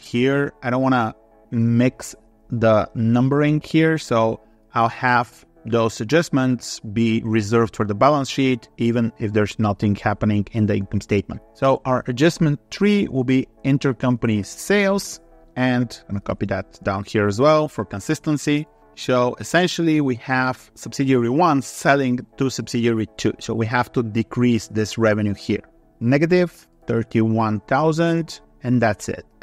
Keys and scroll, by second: 0.4 ctrl+v, 4.5 ctrl+s, 15.4 ctrl+c, 16.7 ctrl+v.